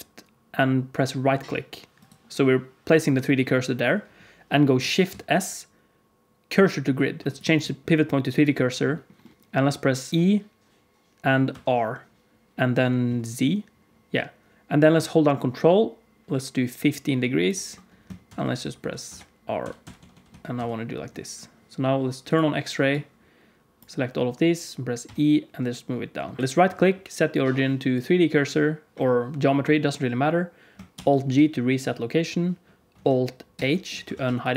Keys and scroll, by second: 5.0 shift+s, 10.1 e, 18.2-20.5 typing, 25.0 e, 30.9 alt+g, 33.5 alt+h, 34.1 alt+a.